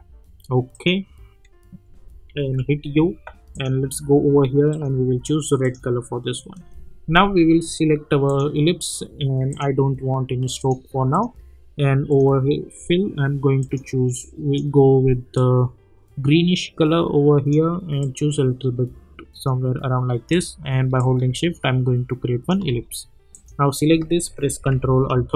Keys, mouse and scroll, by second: 0.7 click, 2.3 u, 3.5 click, 8.2-23.3 drag, 24.9 ctrl+alt+Home.